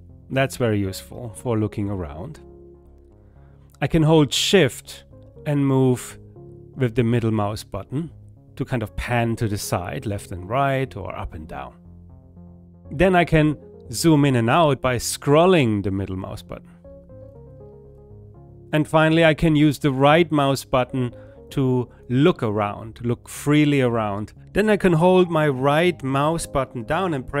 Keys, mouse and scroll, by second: 18.6-24.1 right drag, 24.4-27.4 right drag, 26.6-27.3 typing.